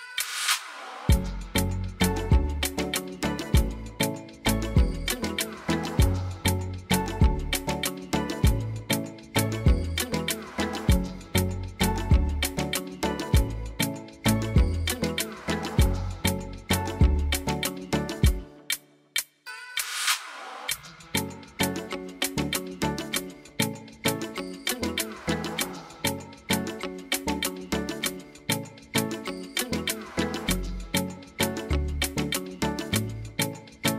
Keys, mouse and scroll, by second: 4.4 click, 6.9 click, 21.1 click, 24.3 click, 26.2 click.